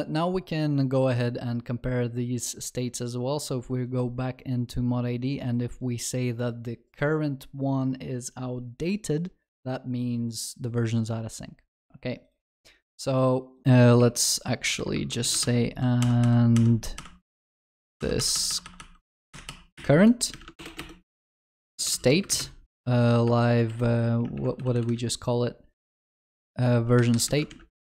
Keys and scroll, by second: 15.4 ctrl+Delete, 17.4 ctrl+Delete, 17.4 ctrl+z, 18.0 ctrl+Delete, 20.6 ctrl+BackSpace, 27.9 ctrl+w.